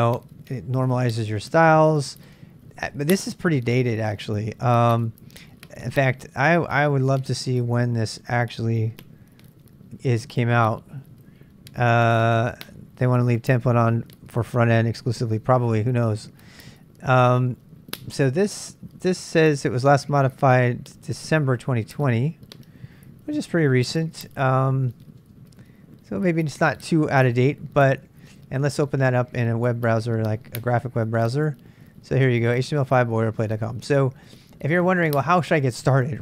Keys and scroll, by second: 2.2 space, 8.9 i, 26.6 h, 27.8-29.6 typing.